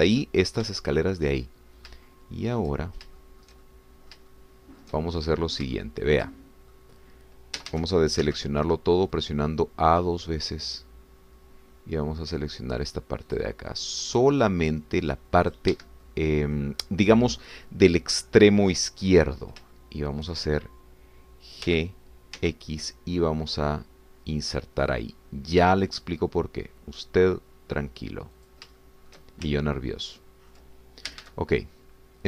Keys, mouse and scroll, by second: 1.8 shift+click, 2.4 shift+click, 4.2-5.3 shift+drag, 5.3-7.9 shift+drag, 8.6 a, 9.2 c, 10.1-14.6 drag, 15.1 click, 15.7-16.7 drag, 16.7 Escape, 17.1 middle click, 20.7 shift+middle click, 22.7 g, 23.4 x, 29.4 shift+click, 29.8 shift+middle click, 30.6-31.7 ctrl+shift+drag, 32.1 a.